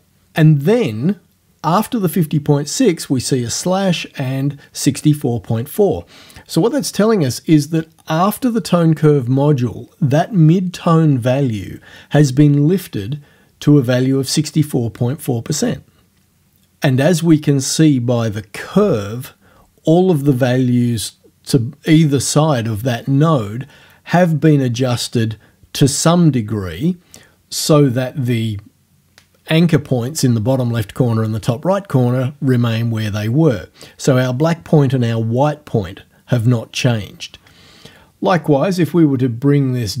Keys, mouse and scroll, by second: 38.9-40.0 drag.